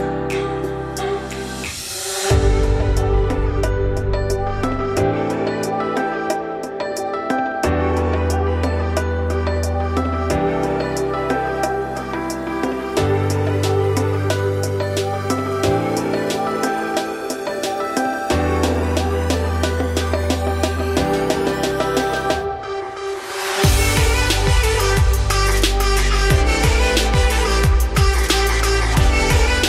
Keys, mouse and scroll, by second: 0.3 scroll up 1, 0.6 g, 1.7-2.5 middle drag, 2.5-3.0 scroll up 1, 3.0 shift+click, 3.4 shift+click, 3.7 shift+click, 4.0 `, 4.6 g, 5.6-6.4 shift+scroll down 5, 5.7-6.1 shift+middle drag, 6.4 alt+f, 7.3 alt+d, 10.1-10.9 scroll up 3, 10.9 click, 11.4 shift+click, 11.7 shift+click, 12.1 shift+click, 12.4 shift+click, 12.6 shift+click, 12.9 shift+click, 13.2 shift+click, 13.6 shift+click, 14.3 shift+drag, 14.7 scroll down 3, 15.1 ctrl+click, 15.4 z, 16.0 z, 16.4 shift+middle drag, 16.7 scroll up 2, 17.0 alt+d, 21.2 shift+click, 21.9 z, 22.3 ctrl+click, 22.7 scroll down 3, 23.0 z, 23.4-23.7 scroll up 2, 23.7-24.5 shift+middle drag, 24.5 alt+d, 28.1 g.